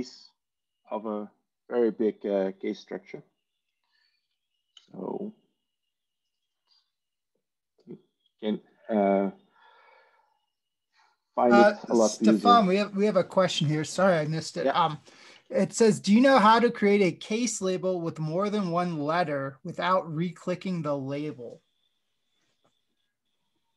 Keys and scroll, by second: 4.9 x, 15.2 Tab.